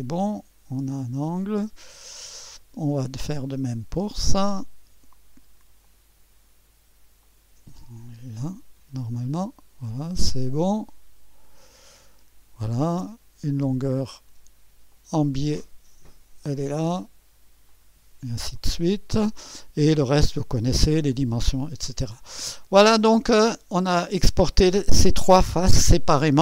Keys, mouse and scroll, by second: 1.3-2.9 drag, 4.1-5.0 drag, 5.8-6.8 drag, 7.3-8.2 ctrl+drag, 9.1 click, 11.4-13.1 drag, 14.9 click, 15.8 click, 16.1-17.0 drag, 17.7-19.5 drag, 22.0-22.5 scroll down 1, 22.5-23.5 right drag, 23.4 click, 23.6 click, 23.6 right click.